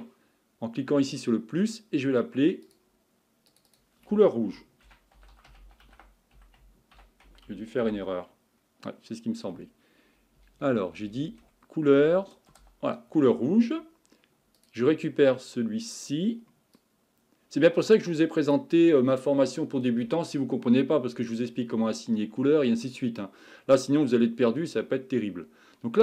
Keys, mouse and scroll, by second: 1.1-3.6 drag, 3.7-6.9 drag, 10.6 Left, 10.9 Left, 11.0 Left, 14.6 click, 15.9 click.